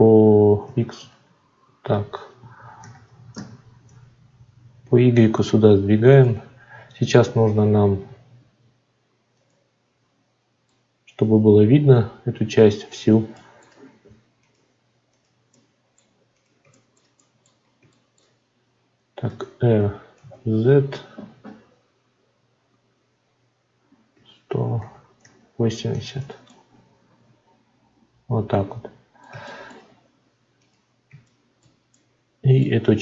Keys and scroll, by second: 2.7 g, 3.3 y.